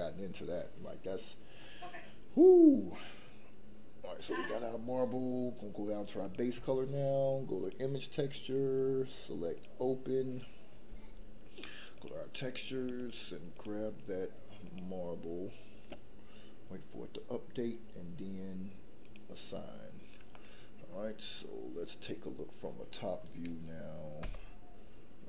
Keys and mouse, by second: 6.4 click, 19.0 click, 20.3-22.0 middle drag, 24.2 KP_7.